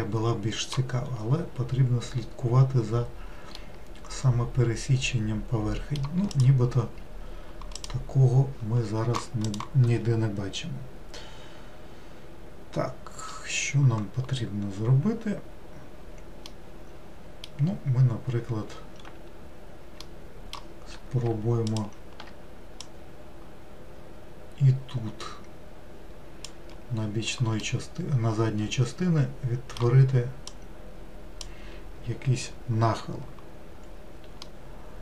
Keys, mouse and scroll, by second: 0.0-1.3 middle drag, 1.3-2.9 scroll up 3, 2.9 scroll down 3, 3.6-6.4 middle drag, 6.4 click, 7.8 click, 16.5-19.6 middle drag, 20.1-21.7 middle drag, 21.7 alt+click, 22.9 click, 27.7-30.5 middle drag, 30.5 click, 34.5-35.0 middle drag.